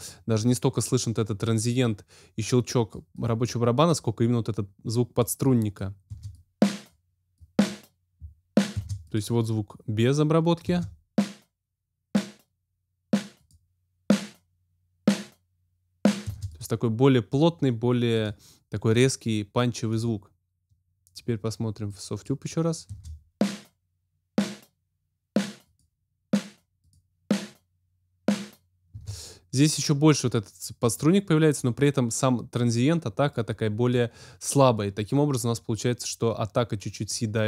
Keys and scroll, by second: 6.1 space, 8.7 space, 10.6 space, 16.2 space, 22.8 space, 28.9 space.